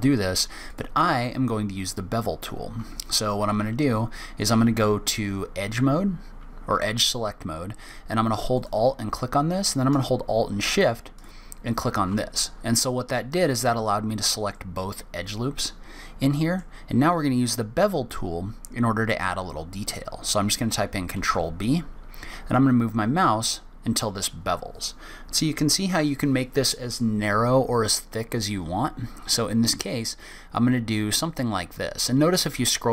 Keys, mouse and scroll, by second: 0.7 alt+click, 1.8 alt+click, 8.5 alt+click, 11.1 alt+shift+click, 14.5 middle click, 21.1 ctrl+b.